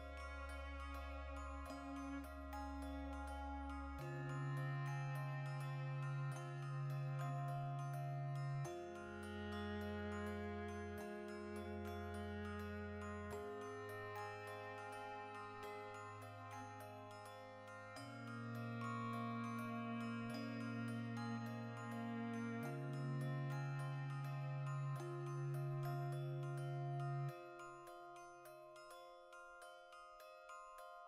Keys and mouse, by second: 0.1 ctrl+r, 1.0 click, 1.1-7.8 ctrl+middle drag, 2.7 Tab, 2.9 shift+s, 5.8 Tab, 6.6 ctrl+r, 6.9 right click, 7.2 v, 7.4 right click, 7.8 l, 9.4 x, 10.2-11.3 drag, 11.3 alt+right click, 11.6 ctrl+middle click, 12.4 g, 13.1 right click, 13.2 g, 13.6 click, 13.7-15.1 middle drag, 15.1 Tab, 15.7 alt+q, 16.0-21.7 shift+middle drag, 19.6 Tab, 20.0 alt+q, 20.4 z, 20.8 a, 21.7 r, 22.6 click, 23.1 g, 23.9 click, 24.3 g, 24.7 click, 25.1 r, 25.7 click, 26.2 z, 27.7 g, 28.1 click, 28.3-31.0 middle drag.